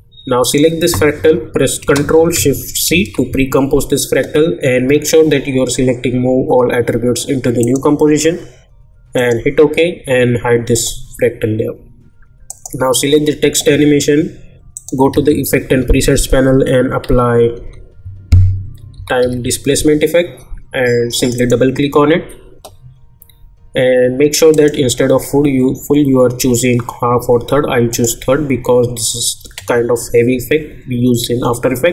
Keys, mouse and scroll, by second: 3.0 ctrl+shift+c, 7.6 click, 14.7 click, 15.1 ctrl+a, 17.6 t, 18.9 typing, 21.1 click, 24.5 click, 27.9 click.